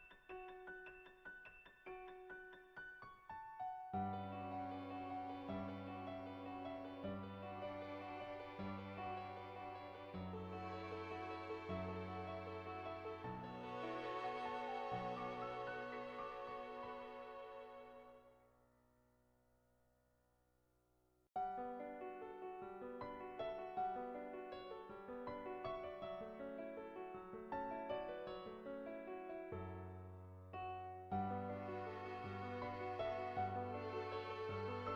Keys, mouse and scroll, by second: 0.4 right click, 1.5-3.9 right drag, 3.9-5.3 middle drag, 5.5 click, 5.5 right click, 7.0-8.7 drag, 7.0-8.7 right drag, 10.9 right click, 11.1-17.1 right drag, 14.8-17.1 drag, 18.1 n, 18.3 n, 19.6 shift+middle click, 20.2 shift+middle click, 20.6 middle click, 21.1 shift+middle click, 21.8 shift+middle click, 22.4 middle click, 23.3 shift+middle click, 23.5 shift+middle click, 24.1 shift+middle click, 27.7 right click, 28.1 middle click, 28.9 Tab, 29.8 shift+middle click, 30.4 shift+a, 33.8 r, 34.6 middle click.